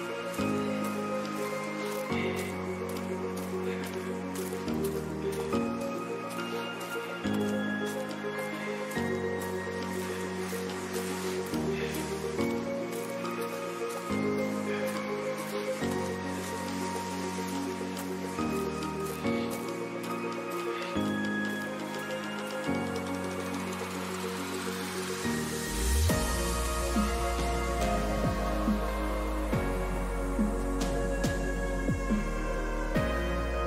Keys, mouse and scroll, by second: 2.0 a, 3.7 middle click, 5.0 b, 6.4-8.3 drag, 8.3-10.3 middle drag, 8.3 a, 9.7 b, 10.9-12.6 drag, 12.4 a, 12.6 middle click, 17.4 a, 17.8 a, 19.3 b, 21.5 e, 28.1 a, 30.1 b, 31.7-33.6 drag, 33.2 a.